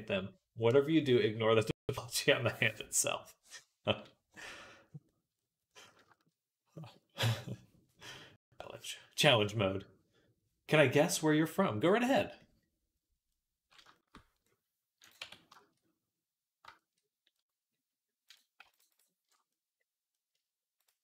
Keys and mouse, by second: 12.2-19.1 right drag, 15.0 Tab, 18.1 click, 20.6 shift+middle click.